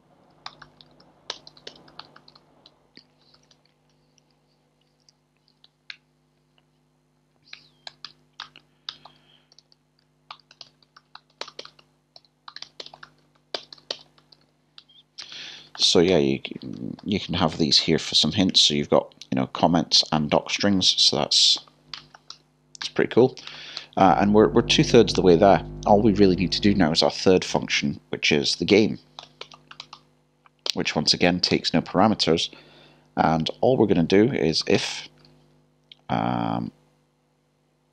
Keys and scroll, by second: 0.2 typing, 3.1-6.0 typing, 10.3-12.2 typing, 16.7-20.1 typing, 21.6 typing, 23.2 typing, 28.2-29.0 typing, 30.7 typing, 34.5-35.8 typing.